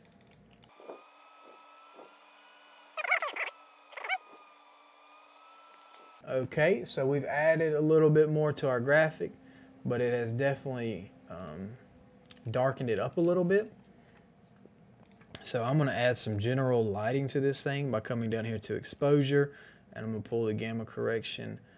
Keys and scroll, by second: 0.2 [, 1.5-2.0 typing, 4.4 ctrl+s, 5.7 KP_7, 5.7 KP_5, 5.7 Return, 6.6 Return, 6.6 KP_5, 6.6 KP_0.